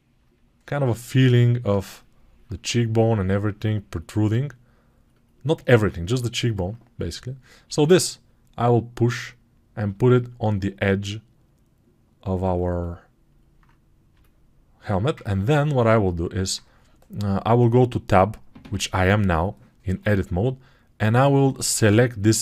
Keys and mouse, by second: 5.6 alt+q, 6.9 Tab, 21.7 2, 22.0-22.4 drag.